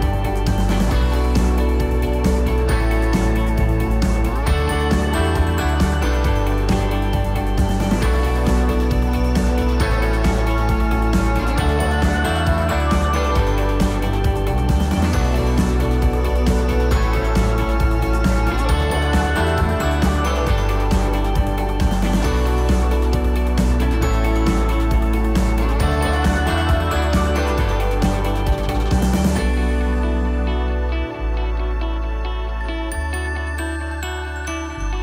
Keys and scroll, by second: 4.2 ctrl+0.